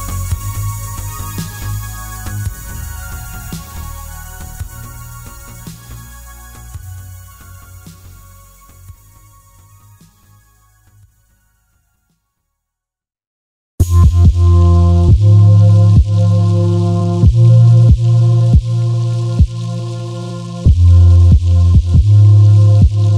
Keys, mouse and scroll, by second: 0.2 ctrl+s, 0.6 scroll down 1, 1.4 Tab, 1.6 click, 1.8 scroll down 1, 1.9-6.6 middle drag, 3.0-3.4 scroll down 1, 3.4-4.5 scroll up 1, 4.5-5.0 scroll down 2, 5.9 scroll up 2, 6.1-6.6 scroll down 2, 6.6-7.8 ctrl+right drag, 7.8 shift+a, 8.8-11.2 middle drag, 9.4 KP_7, 10.0 g, 11.2 click, 11.7 s, 13.7 click, 13.8-18.6 middle drag, 14.9 scroll up 1, 17.8 g, 18.6 click, 18.8-22.0 middle drag, 20.3-21.4 scroll up 1, 21.4 Tab, 21.9 2, 22.0 click, 22.5 ctrl+click, 22.9 click.